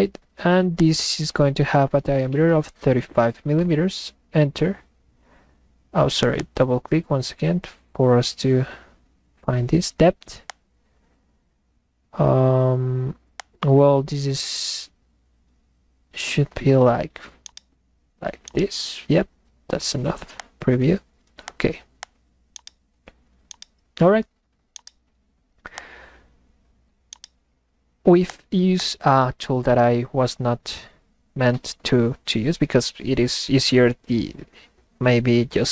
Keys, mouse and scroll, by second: 0.8 click, 6.2 click, 6.4 click, 10.5 click, 13.4 click, 17.4-18.1 middle drag, 17.6-18.1 right drag, 18.4-19.5 middle drag, 18.6-19.5 right drag, 20.4 click, 21.4 click, 22.0 click, 22.5 middle click, 22.6 right click, 23.4-24.4 middle drag, 23.7-24.4 right drag, 24.7-25.4 middle drag, 24.9-25.5 right drag, 25.8 click, 28.3 click, 28.8 click.